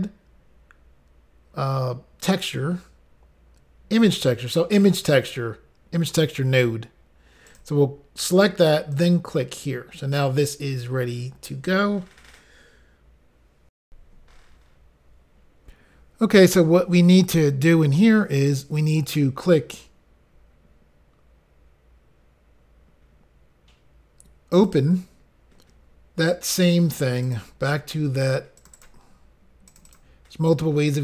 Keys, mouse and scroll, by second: 7.5 click, 7.6 click, 8.9 click, 13.8 Insert, 24.6 click, 24.7 click, 27.2 click, 27.3 click, 27.8-28.2 scroll down 2, 28.6 click, 28.7 click, 28.7 click, 28.8 click, 29.7 click, 29.8 click, 29.8 click, 29.9 click.